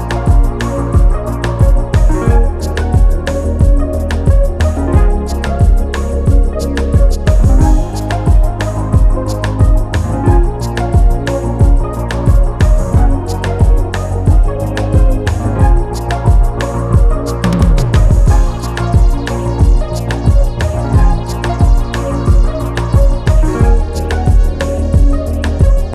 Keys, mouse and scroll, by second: 0.0 click, 1.6 click, 2.8 shift+click, 4.2 scroll down 2, 6.8 shift+d, 12.2 shift+d, 14.9-15.4 scroll down 1, 15.4-15.9 scroll up 2, 15.9 click, 16.6 scroll up 5, 17.3-18.6 scroll down 4, 18.6 click.